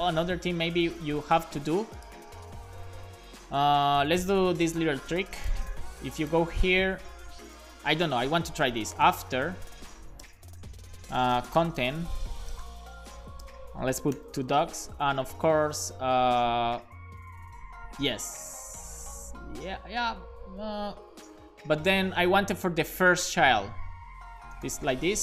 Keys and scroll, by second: 5.7 super+c, 7.6 super+v, 7.9-14.1 typing, 10.6 Return, 14.3 super+s, 14.7 Up, 15.0 Left, 15.1 Left, 15.4 Left, 15.7 Left, 24.7 r.